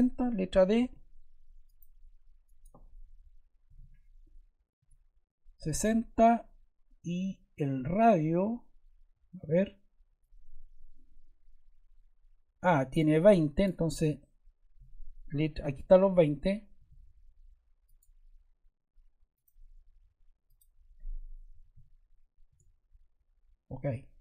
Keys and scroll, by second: 0.7 d, 3.6 6, 4.7 Return, 16.7 d, 21.2-22.1 typing, 22.4 Return.